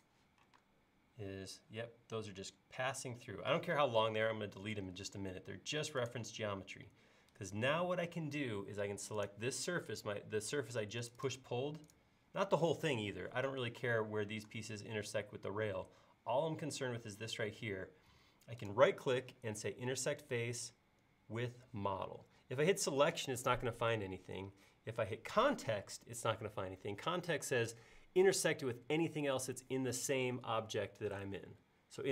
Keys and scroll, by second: 0.6 space.